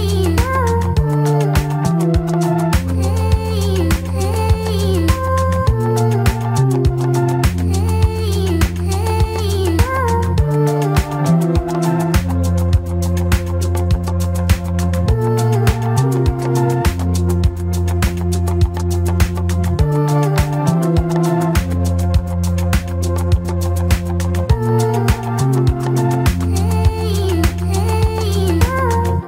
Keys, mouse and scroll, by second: 3.2 click, 11.2 click, 11.6 click, 12.4 shift+click, 12.7 m, 13.9 click, 14.6 g, 15.5 Delete, 16.9 shift+click, 17.4 f, 17.6 click, 17.7 alt+right click, 18.7-19.4 scroll up 2, 18.8 alt+middle click, 19.4 click, 20.5 right click, 21.5 click, 21.7 right click, 22.6 click, 22.7 right click, 23.3 click, 23.4 right click, 24.5 click, 24.6-25.8 right drag, 26.1 click, 27.0 click, 27.8 ctrl+click, 28.5-29.2 right drag.